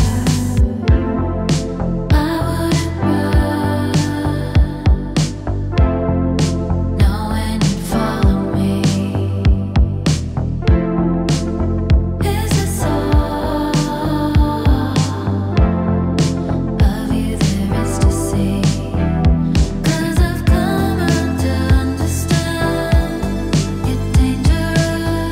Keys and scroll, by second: 1.1 `, 4.6 x, 6.8 space, 8.1 s.